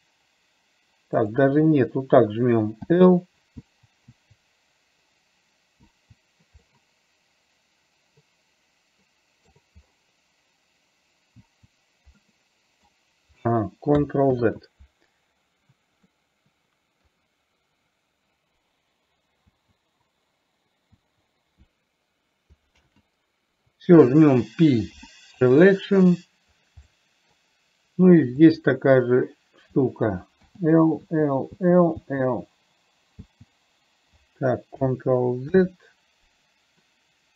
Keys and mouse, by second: 4.0 l, 6.2 l, 7.0-9.8 middle drag, 12.5 middle click, 14.8 ctrl+z, 16.4-17.4 middle drag, 21.3 l, 23.2 ctrl+z, 25.2 p, 27.2 middle click, 31.4 l, 32.4 l, 33.7 l, 35.8 ctrl+z.